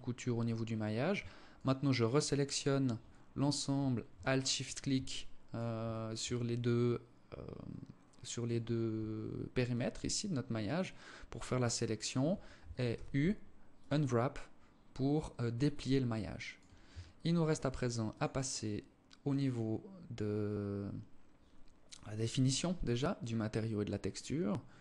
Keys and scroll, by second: 12.1 u, 16.1 Tab.